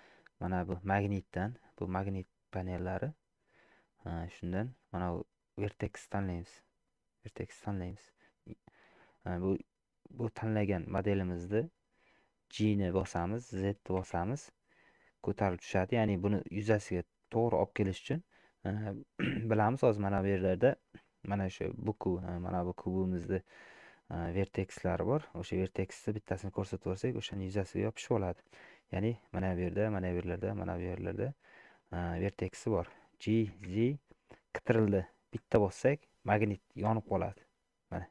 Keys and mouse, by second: 4.2-7.6 drag, 10.7 click, 13.0 g, 22.4 click, 25.2 click, 25.9 click, 33.3 g.